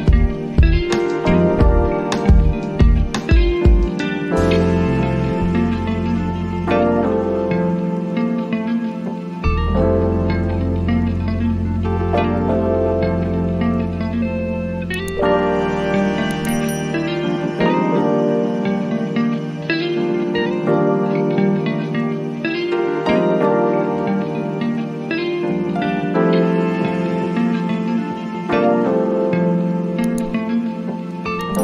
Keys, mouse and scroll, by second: 3.3 click, 6.6-25.9 drag, 26.9 click, 28.8-30.9 drag, 30.9-31.6 drag.